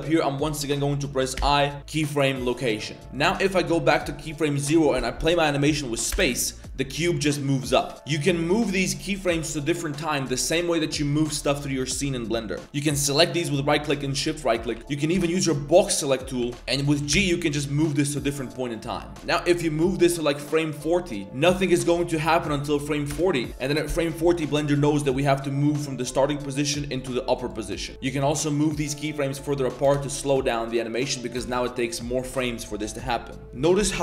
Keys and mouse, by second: 1.3 i, 2.5-3.0 typing, 3.2-4.4 drag, 6.1 space, 7.9 shift+a, 8.4 shift+click, 9.2 shift+click, 10.2 click, 10.6 g, 12.6 click, 13.9 shift+click, 14.6 a, 14.7 a, 14.8 b, 15.1 b, 16.2 a, 16.4 a, 16.5 c, 17.1 g, 18.9 click, 19.1 a, 19.1 b, 19.2 g, 20.2-21.4 drag, 21.2 space, 22.1 space, 23.1 space, 23.5 click, 24.9 click, 26.8-27.5 drag, 27.8 drag, 27.9 space, 28.2 g, 29.4-29.7 drag, 29.8 space, 31.4 space.